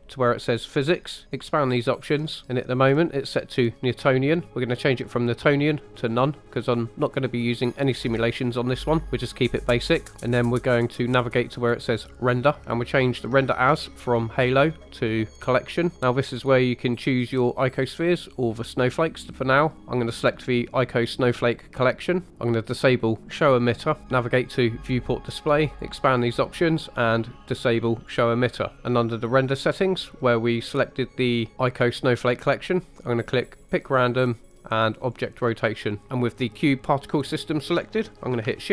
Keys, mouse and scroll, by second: 1.4 click, 2.2-3.9 scroll down 3, 5.1-6.1 drag, 10.1 scroll down 3, 10.4-11.4 scroll down 1, 12.0 click, 12.6 scroll down 1, 13.9-15.5 drag, 20.2-21.5 drag, 23.3 click, 24.0-25.0 scroll down 2, 25.7 click, 26.1-28.0 scroll down 2, 28.0 click, 33.6 click, 35.0 click, 36.0 ctrl+z, 36.0 click.